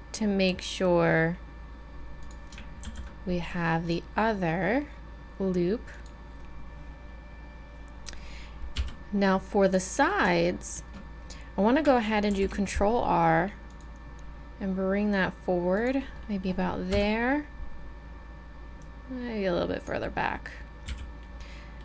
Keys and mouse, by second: 2.9 ctrl+r, 8.8 z, 9.3-12.3 middle drag, 12.3 ctrl+r, 16.9 KP_3, 18.8-20.9 drag, 20.9 a, 21.7 middle click.